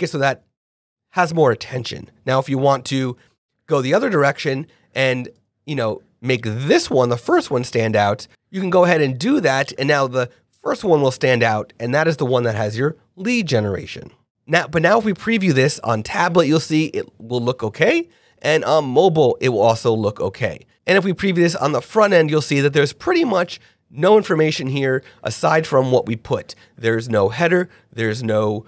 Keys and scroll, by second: 3.4 super+z, 5.5 super+z.